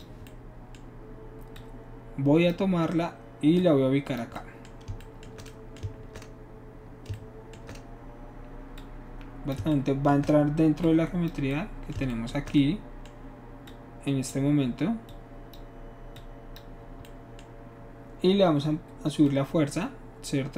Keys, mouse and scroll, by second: 1.6 click, 3.6 click, 8.8 shift+click, 10.8 shift+click, 11.5 shift+middle click, 13.7 shift+click, 15.1 click, 16.1 click, 19.2-20.5 drag.